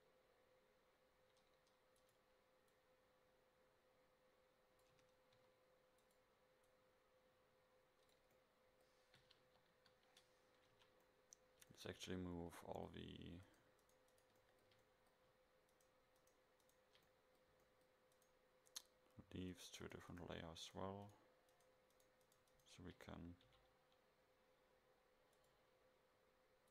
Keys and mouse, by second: 2.9 right click, 5.0 Tab, 5.4 s, 6.8 click, 9.5 KP_7, 9.8 KP_5, 10.8 a, 16.5 right click, 17.3 middle drag, 17.9-20.2 right drag, 23.5 m.